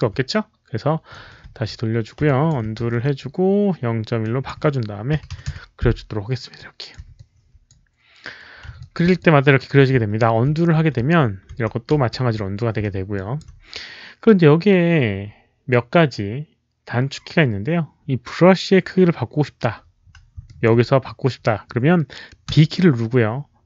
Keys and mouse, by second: 0.9-1.6 typing, 1.1 alt+click, 2.2 alt+click, 2.8 ctrl+z, 4.1 click, 4.4 ctrl+z, 4.4 Return, 5.1 KP_Decimal, 5.3 KP_1, 5.4 Return, 6.5 click, 6.8 Return, 6.8 ctrl+z, 6.8 KP_1, 6.8 KP_Decimal, 7.1 alt+click, 8.7 alt+click, 9.1 alt+click, 10.4 ctrl+z, 10.4 Return, 10.4 alt+click, 10.4 KP_1, 11.4 ctrl+z, 13.0 ctrl+z, 13.0 alt+click, 15.3 ctrl+z, 15.3 alt+click, 18.0 ctrl+z, 18.0 alt+click, 19.6 ctrl+z, 19.6 alt+click, 19.9 ctrl+z, 20.4 ctrl+z, 20.4 alt+click, 22.4 b.